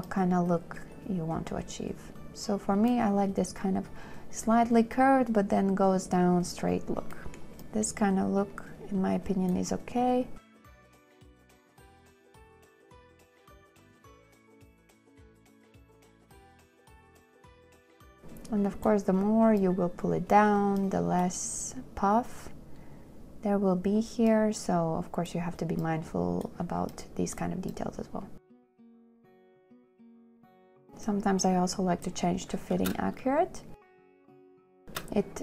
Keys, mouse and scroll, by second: 11.8 space, 12.3 space, 14.0 shift+click, 14.8 space, 18.0 space, 29.3 space, 30.5 space, 30.7 2, 31.9 middle click, 31.9 scroll, 33.3 space.